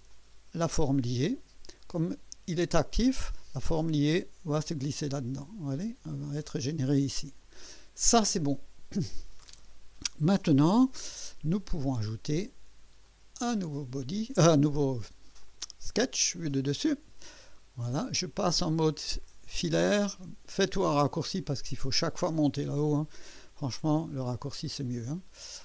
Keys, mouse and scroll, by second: 0.0-0.6 typing, 0.1 click, 6.1 click, 13.0 click, 15.4 click, 16.5 click, 17.4 scroll up 2, 17.9-19.4 right drag, 20.3 typing, 20.9 right click, 23.1 scroll up 2, 23.5 scroll down 2, 23.9 scroll up 2, 24.7-25.2 right drag.